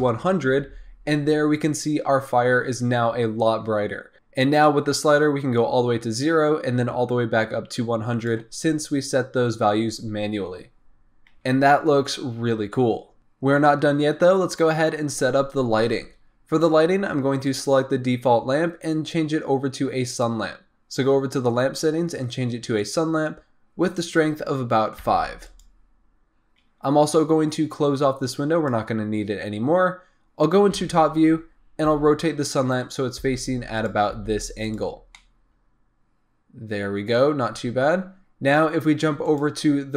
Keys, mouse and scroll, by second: 4.6-8.2 drag, 13.2-15.7 scroll up 1, 15.9-17.4 scroll down 5, 17.4 click, 20.0 click, 22.7 click, 23.9-25.5 drag, 26.0-28.2 scroll up 4, 28.2-29.4 drag, 29.4-30.7 scroll down 2, 30.7 KP_7, 31.8 r, 33.2 g, 34.1 r, 35.1-37.4 middle drag, 37.4 scroll up 2, 39.2 click.